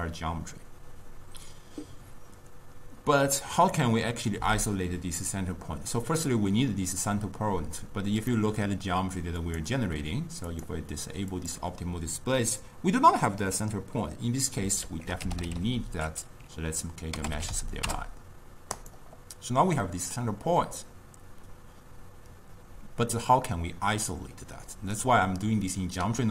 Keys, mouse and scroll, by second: 8.4-9.5 middle drag, 9.5 click, 10.6-11.6 drag, 14.9 ctrl+a, 25.1-26.3 drag.